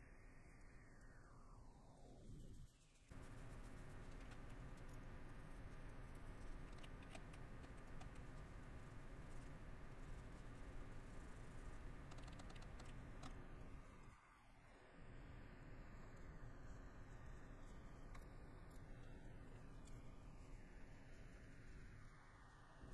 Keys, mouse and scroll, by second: 1.3 middle click, 5.0 middle click, 5.9 middle click, 8.6 middle click, 9.6 middle click, 11.9 middle click, 12.9 middle click, 14.7 middle click, 15.6 middle click, 16.3 middle click, 16.9 middle click, 17.4 middle click, 17.9 middle click, 18.1 scroll, 18.3 middle click, 18.7 scroll, 18.8 middle click, 20.0 middle click, 21.3 middle click, 21.8 middle click, 22.6 middle click.